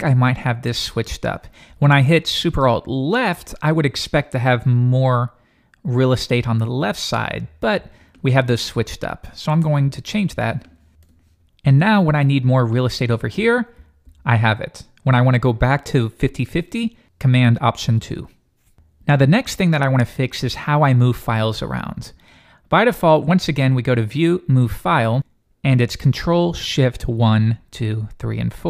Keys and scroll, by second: 13.7 alt+super+Left, 17.7 alt+super+2.